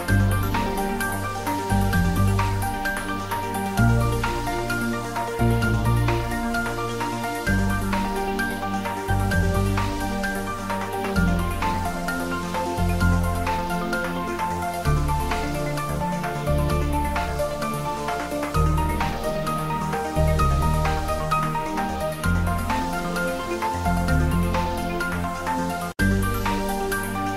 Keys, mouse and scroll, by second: 0.1 shift+middle click, 0.9 middle click, 1.5-2.5 typing, 3.1 click, 4.2 ctrl+middle click, 4.6 shift+z, 6.0 shift+click, 6.9-8.6 typing, 8.4 click, 9.9 click, 10.5 shift+z, 10.8-12.3 middle drag, 12.0-13.4 typing, 12.9 click, 14.2 click, 14.4 middle click, 15.0-17.1 typing, 18.5 click, 18.6 ctrl+z, 18.7-19.7 typing, 20.8 click, 21.2 middle click, 22.1 ctrl+s, 22.4 click, 23.4 ctrl+z, 24.2 g, 25.6 click, 25.8 ctrl+s, 27.1 ctrl+middle click.